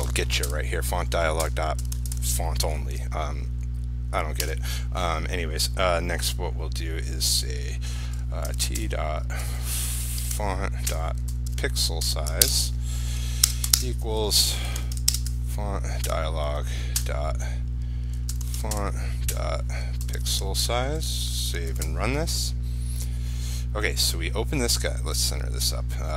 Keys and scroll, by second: 0.1 ctrl+space, 12.6 ctrl+space, 15.3 ctrl+space, 21.3 ctrl+s, 21.9 ctrl+r.